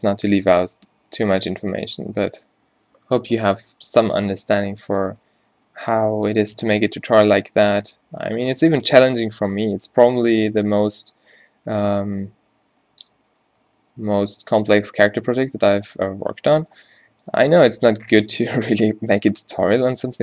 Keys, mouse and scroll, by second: 17.1 Tab, 17.7 g, 18.5 Tab, 19.4 a.